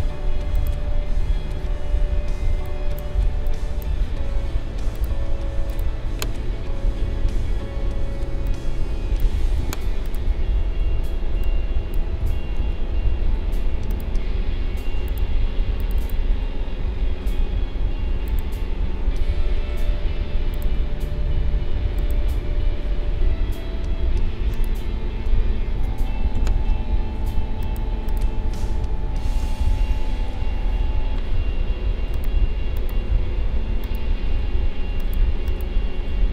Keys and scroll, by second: 12.6 ctrl+z.